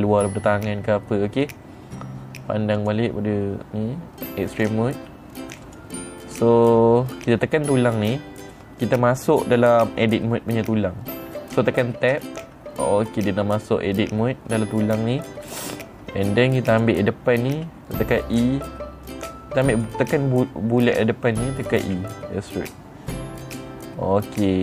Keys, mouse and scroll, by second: 3.3 click, 5.0 click, 6.1 click, 6.7 click, 12.6 Tab, 15.9 middle click, 15.9-16.3 scroll up 3, 17.2 click, 20.2 click, 22.3 e.